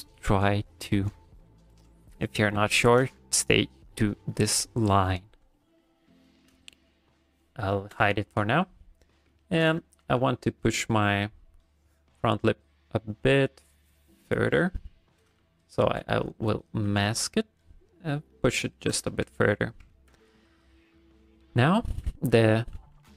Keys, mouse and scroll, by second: 1.7 right click, 5.8 shift+middle click, 7.2 click, 7.7 shift+middle click, 8.1 ctrl+middle click, 8.5 middle click, 9.1 middle click, 9.4 ctrl+middle click, 9.7 middle click, 10.5 ctrl+shift+click, 14.6 ctrl+shift+click, 14.8 middle click, 15.4 a, 16.2 middle click, 16.6 middle click, 16.9 g, 17.1 f, 17.7 click, 18.1 click, 18.3 middle click, 18.8 shift+middle click, 19.1 ctrl+middle click, 19.3 middle click, 19.9 ctrl+middle click, 20.3 middle click, 21.0 middle click, 21.6 shift+middle click, 22.4 middle click, 22.8 f.